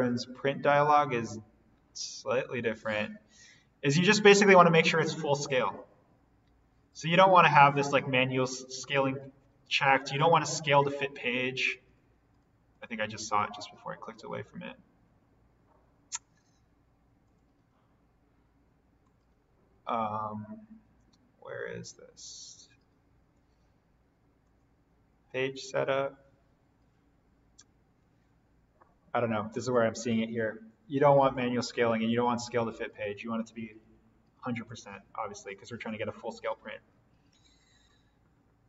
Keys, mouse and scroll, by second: 6.8 click, 17.2 click, 24.4 click, 34.6 click.